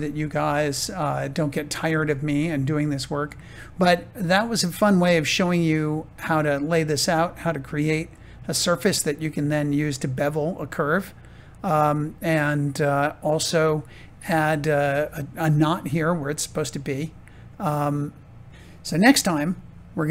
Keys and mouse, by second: 0.1 shift+middle click, 0.8 middle click, 2.0 shift+middle click, 7.1 shift+middle click, 15.5 click, 16.0-18.3 middle drag, 18.5 shift+middle click, 19.1-20.1 middle drag.